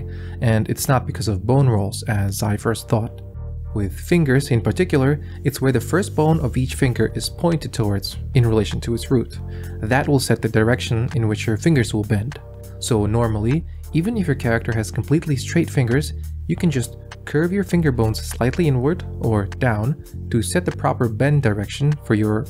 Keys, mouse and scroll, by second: 1.1-4.0 drag, 4.4 middle click, 6.0 click, 6.8 click, 7.5 click, 8.8 click, 10.6-13.0 middle drag, 14.6-15.6 drag, 16.1 Tab, 17.1 shift+click, 17.9 r, 18.8 g, 21.1 s.